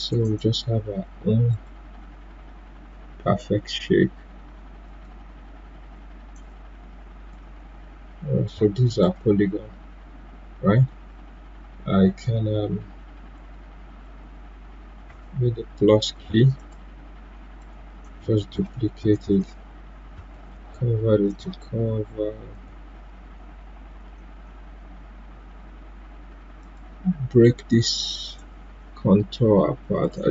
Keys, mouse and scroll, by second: 4.8-9.0 drag, 16.5 click, 16.5 click, 20.3 ctrl+q, 21.2 click, 26.6 click.